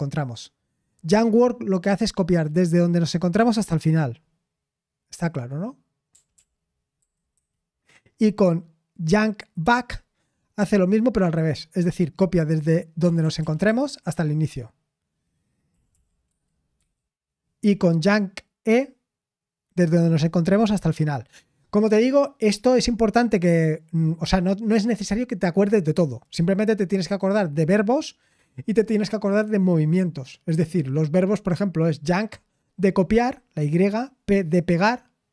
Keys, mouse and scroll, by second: 14.1 typing, 15.4-17.2 typing.